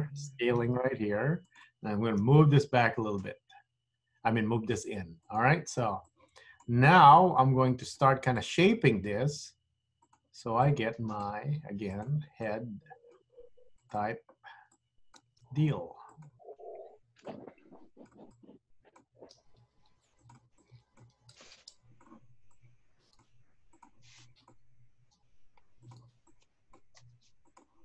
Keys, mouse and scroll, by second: 0.6 s, 2.4 g, 6.2 click, 7.1 g, 8.5 click, 9.4 g, 10.8 click, 11.4 g, 12.5 click, 13.4 g, 14.8 click, 15.4 g, 16.9 click, 17.5 g, 18.5 click, 19.2 g, 20.6 click, 21.4 g, 22.6 click, 23.3 g, 24.3 click, 24.8 g, 26.3 click, 27.0 g.